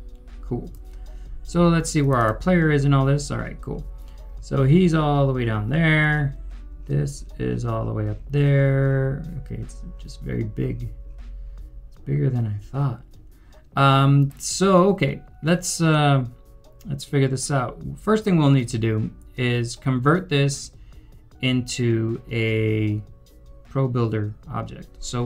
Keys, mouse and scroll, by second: 2.2 double click, 3.2 scroll down 1.